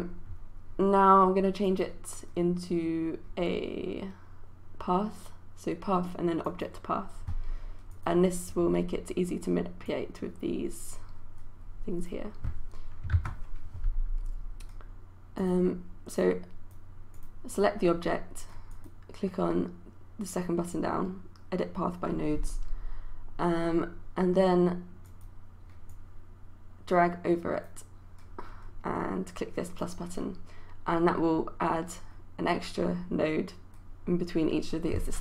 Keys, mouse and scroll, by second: 13.2 ctrl+z, 15.4-35.2 drag.